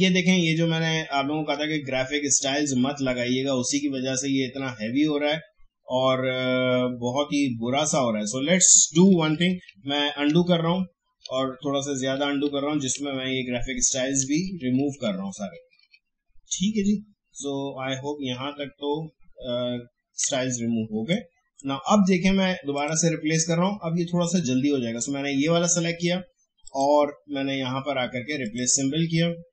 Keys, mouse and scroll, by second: 0.5 click, 0.8-1.5 alt+scroll up 1, 4.5 alt+scroll up 1, 4.7 alt+scroll down 1, 9.0 alt+scroll down 1, 10.5 ctrl+z, 19.5 ctrl+z, 20.8 space, 21.1 click, 21.3 space, 22.7 click, 26.6 click.